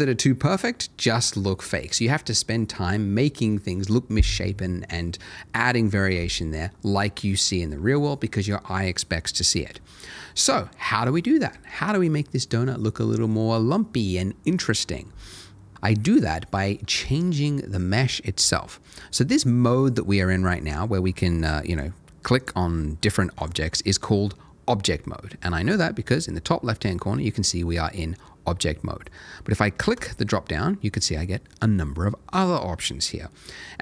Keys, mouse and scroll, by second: 10.3 middle click, 20.1 scroll down 1, 20.5 scroll up 1, 20.6 scroll down 1, 21.7 click, 22.6 scroll up 1, 23.3 click, 23.6-24.2 scroll up 1, 29.9 click.